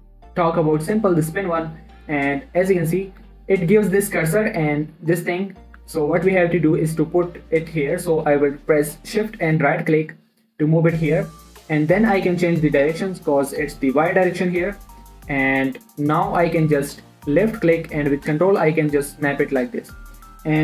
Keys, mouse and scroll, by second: 2.9-3.8 scroll up 4, 5.3 middle click, 6.2 1, 6.6 scroll up 1, 6.9 shift+middle click, 7.1 scroll up 1, 10.4 shift+right click, 12.7-13.4 scroll down 1, 13.4 click, 15.9-19.3 drag, 19.5 scroll down 2, 20.0 shift+middle click, 20.5-20.6 scroll down 2.